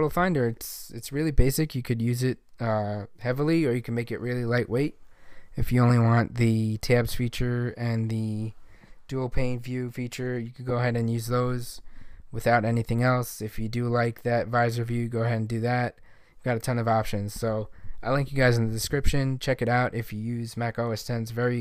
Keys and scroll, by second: 10.2 super+u.